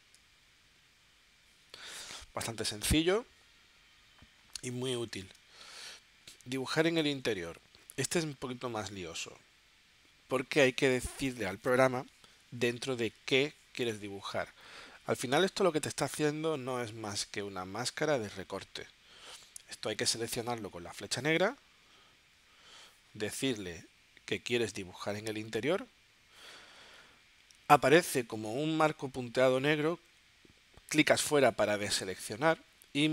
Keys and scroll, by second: 5.4 space.